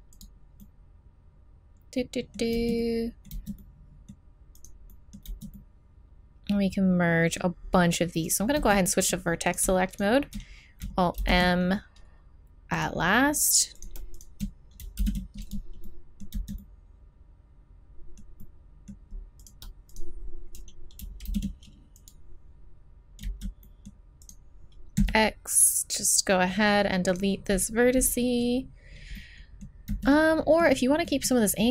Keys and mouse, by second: 0.6-1.7 middle drag, 2.5 z, 3.3 z, 5.3 z, 5.9 middle click, 6.0 middle click, 6.7 middle click, 8.6 z, 9.0 middle click, 11.2 alt+m, 13.8-16.6 drag, 15.0 alt+m, 16.3 z, 20.2-21.3 drag, 21.3 alt+m, 23.2 z, 23.6 click, 24.2 right click, 25.0 x, 27.1-29.0 right drag, 29.2 right click, 29.9 z.